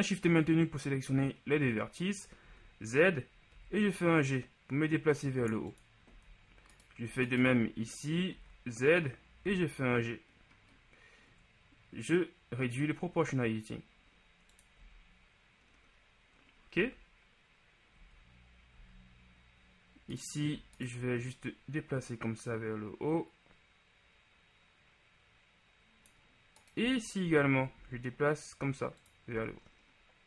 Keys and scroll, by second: 2.6 z, 3.6 g, 6.2 z, 8.4 z, 9.5 g, 14.9 z, 18.8 z, 27.8 shift+g, 29.4 z.